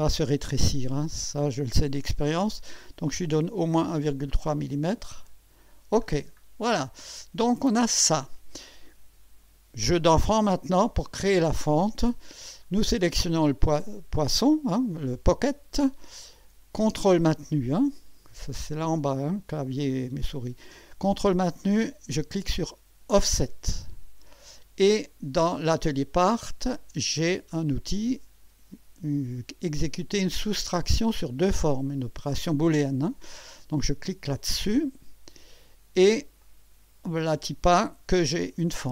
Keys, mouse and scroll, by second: 5.2 click, 6.0-6.4 scroll down 1, 6.8 scroll down 1, 7.5-8.6 right drag, 12.4-12.8 scroll down 1, 13.3 click, 23.1 ctrl+click, 34.7 click, 36.4-37.7 drag, 38.2-38.7 scroll up 1.